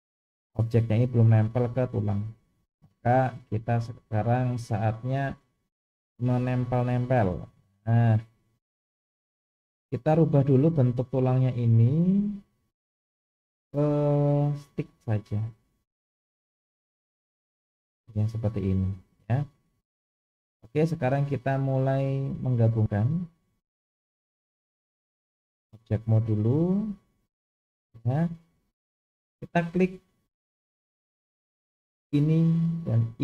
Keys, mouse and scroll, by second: 2.8-3.9 scroll up 1, 5.3 click, 7.4-7.9 shift+middle drag, 10.2 click, 12.6 click, 13.6-15.0 drag, 16.6 click, 17.2 click, 18.1-19.8 middle drag, 20.1-20.6 scroll up 3, 20.8-21.1 shift+middle drag, 22.3-22.9 middle drag, 23.3 click, 24.0 click, 25.2-25.9 drag, 27.2 click, 27.8-29.3 middle drag, 29.7 click, 32.1 shift+click, 33.1 shift+click.